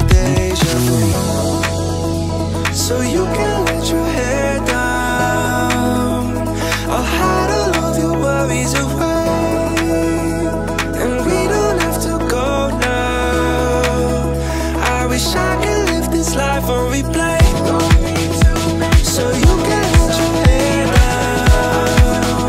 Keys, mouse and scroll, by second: 1.2 click, 3.6 ctrl+a, 4.6 click, 5.2 shift+click, 7.0 ctrl+j, 8.0-8.3 shift+middle drag, 8.5-9.1 scroll up 2, 9.1-11.0 middle drag, 11.8 click, 12.8-14.2 scroll down 1, 14.2 click, 14.7 shift+middle drag, 15.2-15.6 scroll up 1, 15.9 drag, 16.4 click, 19.2 click, 21.0 click, 21.7 click, 22.2-22.4 drag.